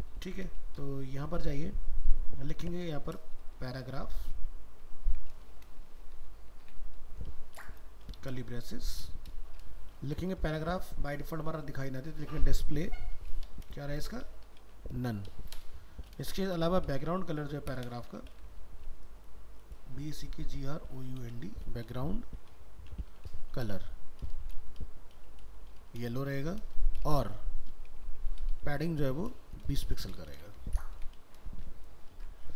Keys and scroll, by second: 0.2 ctrl+s, 4.8 ctrl+s, 32.2 ctrl+s.